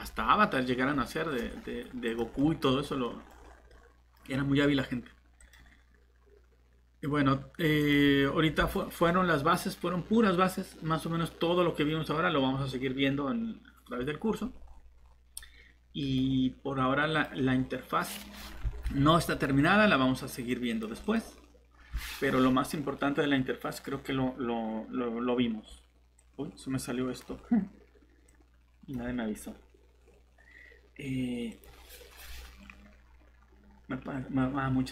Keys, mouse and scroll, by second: 18.6 alt+Escape, 26.2 click.